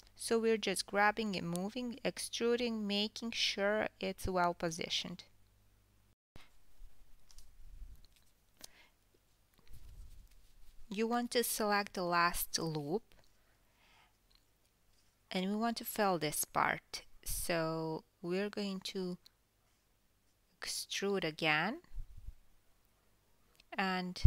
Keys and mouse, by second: 0.6 e, 3.4 s, 5.3 KP_1, 6.8 g, 8.7 alt+click, 8.9 s, 9.8 KP_1, 10.6 s, 10.9 KP_1, 12.2 KP_1, 12.7 s, 13.0 KP_1, 15.1 1, 18.8 KP_4, 19.8 KP_1.